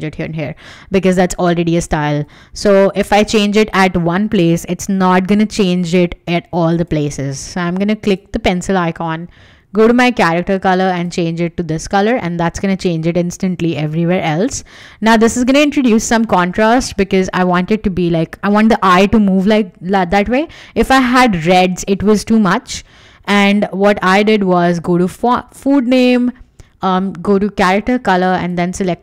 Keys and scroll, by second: 2.3 v, 3.1 super+z, 3.6 Escape, 16.1 w, 20.1 super+z.